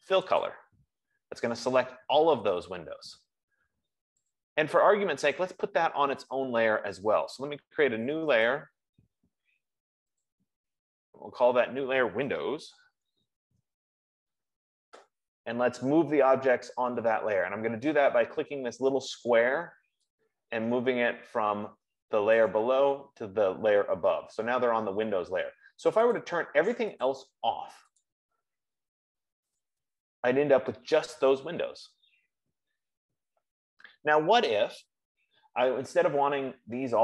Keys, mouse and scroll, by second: 1.0 click, 4.8 click, 9.0 click, 10.7 click, 12.5-14.1 typing, 21.3 F15, 22.5 click, 26.6 click, 27.4 click, 30.0 click.